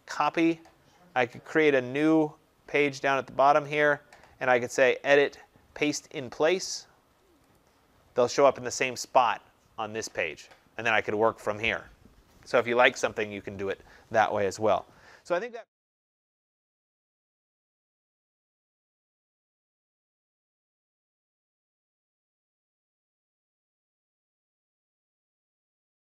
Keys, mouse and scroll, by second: 0.1 click, 2.1 click, 3.6 click, 3.8 click, 5.3 click, 7.4 click.